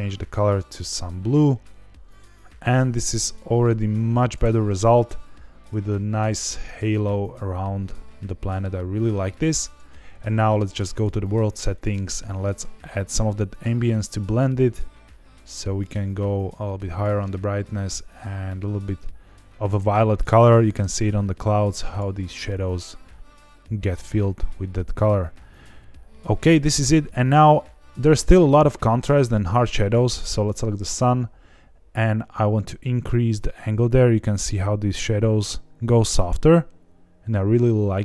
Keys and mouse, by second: 5.5 click, 10.9 click, 11.7 click, 21.8 click, 30.9 click, 32.4-38.0 drag.